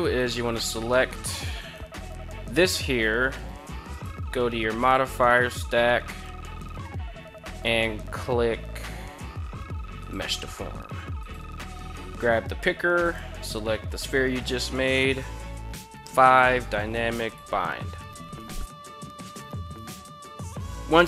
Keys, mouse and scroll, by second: 0.7 right click, 1.1 right click, 4.4-9.8 drag, 10.6 click, 15.7 click, 19.3 click.